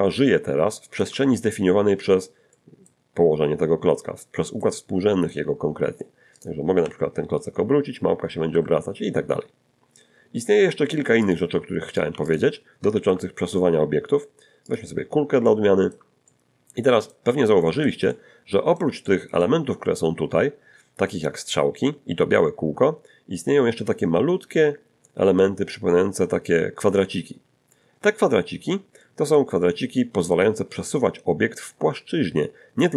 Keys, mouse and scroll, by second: 1.5 shift+middle click, 2.5 middle click, 4.6 middle click, 6.4 right click, 6.8 r, 8.5 Escape, 10.2 scroll down 1, 11.0 x, 11.3 click, 11.9 right click, 12.1 x, 12.3 click, 12.9 shift+a, 14.7 click, 15.2 scroll down 1, 15.4 shift+middle click, 16.3-18.0 shift+middle drag, 18.1 middle click, 19.7-20.0 scroll up 1, 21.0 scroll up 1, 29.0-30.5 middle drag.